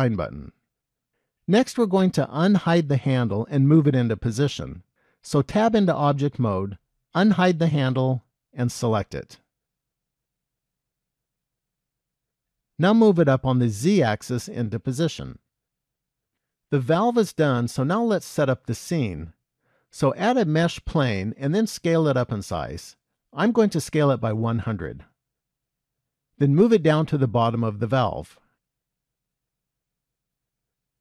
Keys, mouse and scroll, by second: 5.6 Tab, 7.3 click, 9.1 click, 10.3 KP_1, 11.0 scroll down 1, 11.7 shift+middle click, 13.1 g, 21.2 shift+a, 23.6 s, 27.3 g.